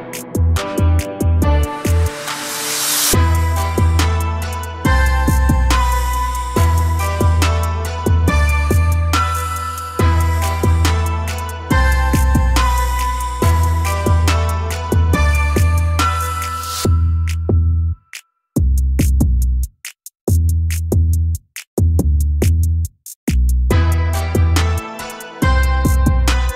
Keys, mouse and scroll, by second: 1.5-4.5 drag, 4.8-10.6 drag, 20.2-20.6 scroll down 1, 20.6 a, 20.8 a, 24.7 click, 26.1 click.